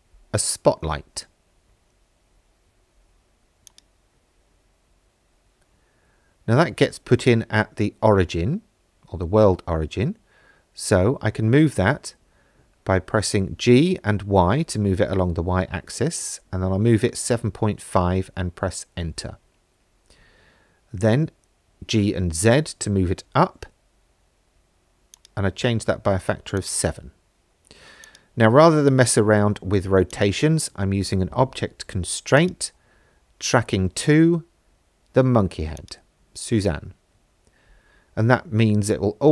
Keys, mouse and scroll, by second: 5.0 middle click, 8.5 g, 9.5 y, 11.9 KP_Subtract, 12.7 KP_7, 13.2 KP_Decimal, 13.6 KP_5, 14.4 KP_Enter, 16.6 g, 17.8 z, 20.3 KP_Enter, 20.3 KP_7, 21.7 middle click, 25.2 click, 26.6-28.2 drag, 30.1-32.5 drag, 35.8 click, 37.8 middle click.